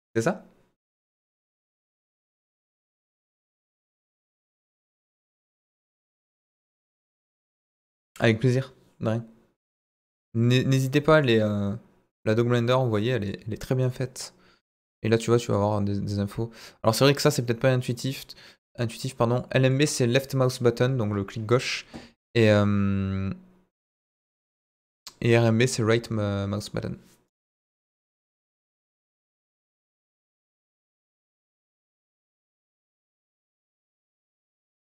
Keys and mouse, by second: 27.2 right click, 28.7 ctrl+right click, 29.5 click, 30.1 right click, 31.0 ctrl+right click, 32.2 click, 33.2 ctrl+z, 33.4 ctrl+z, 33.8 middle click.